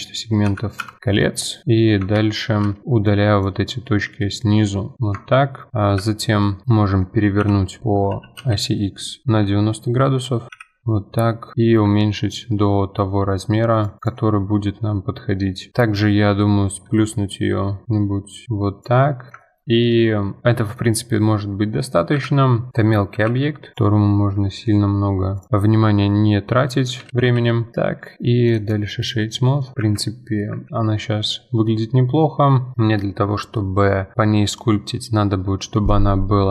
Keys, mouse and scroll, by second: 2.4 z, 3.0 click, 4.0 x, 5.2 Tab, 5.7 middle click, 5.9 KP_1, 6.6 middle click, 7.4 KP_7, 8.1 r, 10.5 KP_1, 15.7-16.4 scroll up 2, 16.4 middle click, 16.9 s, 19.0-22.2 middle drag, 22.2 KP_1, 22.7 s, 23.3-25.8 middle drag, 25.8 g, 27.7 scroll down 5, 28.0 middle click, 28.5 right click, 29.1 right drag, 29.3 scroll up 2, 29.6 middle drag, 29.8 F4, 30.0-30.5 middle drag, 30.5 F4, 30.7-32.7 middle drag.